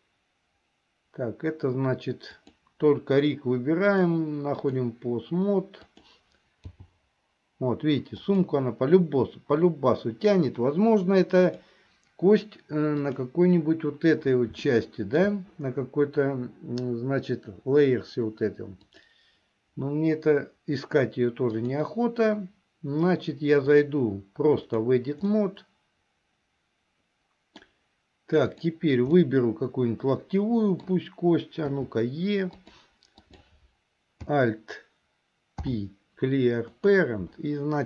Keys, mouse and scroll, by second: 2.4 click, 4.0-5.0 drag, 5.9 click, 6.7 g, 11.5 click, 13.1 click, 14.8 shift+middle click, 19.1 click, 23.8-25.1 drag, 25.5-27.9 middle drag, 28.6 click, 29.3-31.0 middle drag, 31.9 e, 33.3 click, 35.6 alt+p.